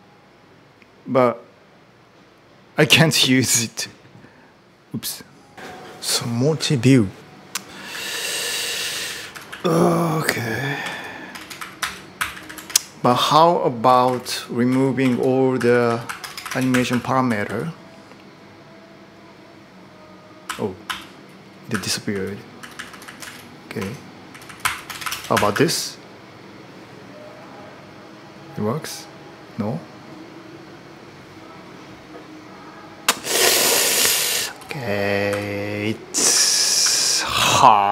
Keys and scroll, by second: 5.5 typing, 7.3-9.6 typing, 10.6-17.8 typing, 20.3-22.8 typing, 23.6 ctrl+d, 23.8-25.8 typing, 34.4-35.1 typing, 36.1-37.9 typing.